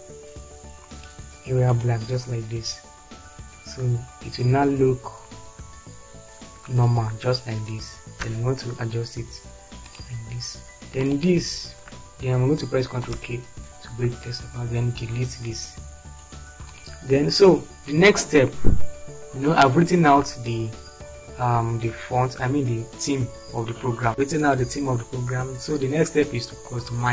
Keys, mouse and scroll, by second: 0.1 typing, 8.3 Right, 13.2 ctrl+k, 15.3 Delete.